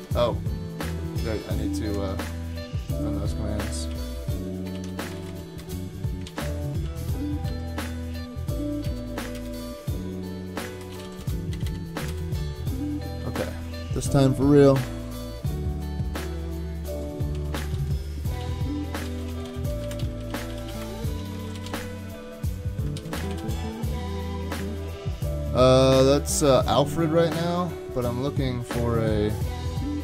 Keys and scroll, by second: 2.0 super+Tab, 3.9 ctrl+c, 4.7 ctrl+r, 4.9-5.8 typing, 6.3 alt+c, 7.5 Down, 8.9 Return, 9.0 super+v, 9.4 Return, 10.6-12.6 typing, 13.1 super+k, 17.1-23.9 typing.